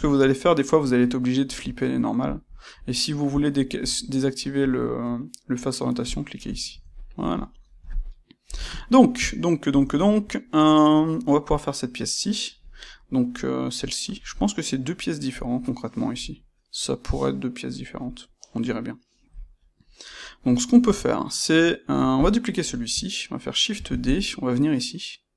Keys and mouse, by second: 0.0 click, 0.3-2.2 middle drag, 2.2-6.8 drag, 6.8-16.4 ctrl+middle drag, 8.4 KP_1, 21.0-22.1 shift+middle drag, 22.1 click, 23.7 shift+d.